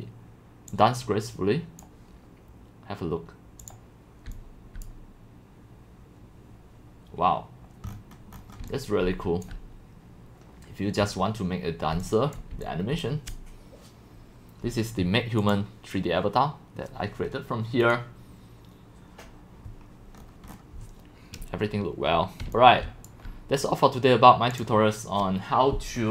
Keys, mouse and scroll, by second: 0.7-1.8 drag, 4.3 c, 4.9 click, 7.9 middle click, 7.9 scroll, 7.9 scroll, 7.9-8.3 scroll, 8.3 scroll down 7, 8.6 x, 8.7-9.5 drag, 9.1 c, 11.9 c, 12.3 click, 12.6 x, 12.8 click, 13.0-16.3 drag, 20.5-22.2 scroll, 22.2 scroll, 22.2-23.4 typing, 22.5-26.1 drag.